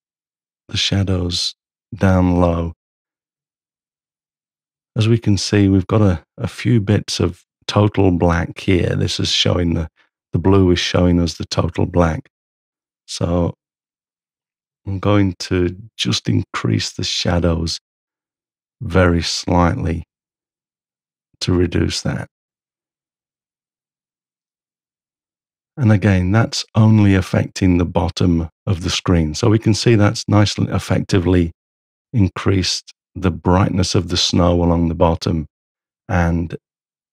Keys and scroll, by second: 13.1 m.